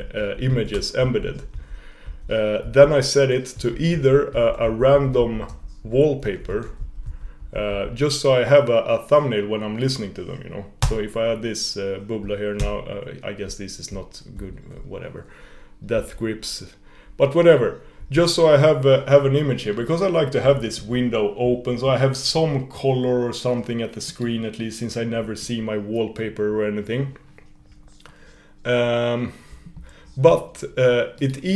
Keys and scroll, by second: 12.8 super+], 14.3 super+[.